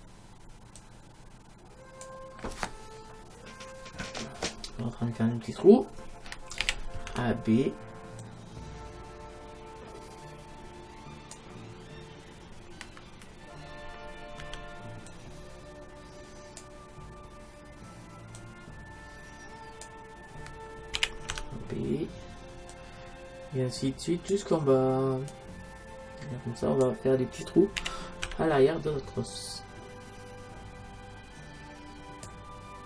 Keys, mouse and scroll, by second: 0.8-2.7 drag, 3.6-4.7 middle drag, 4.7-5.6 scroll down 1, 6.6 a, 7.1 b, 14.4 b, 18.4-20.2 drag, 21.0 a, 21.4 b, 25.3-27.2 drag, 27.8 a, 28.3 b.